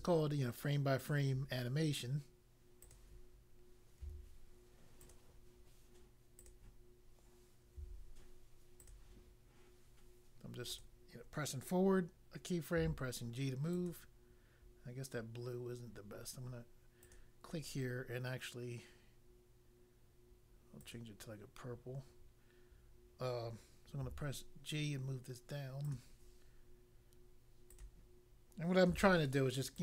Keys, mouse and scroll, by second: 1.0 click, 2.8 click, 4.0 g, 5.0 click, 6.4 click, 7.7 g, 8.8 click, 10.6 click, 12.8 g, 13.6 click, 17.0 click, 20.8 click, 24.0 g, 25.8 click, 27.7 click, 28.8 g, 29.7 click.